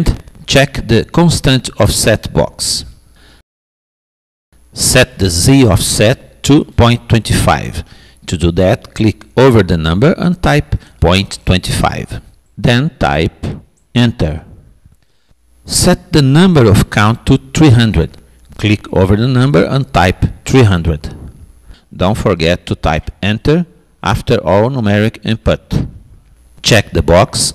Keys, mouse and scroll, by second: 1.7-3.4 drag, 6.6-8.4 drag, 17.2-18.4 drag, 19.6 0.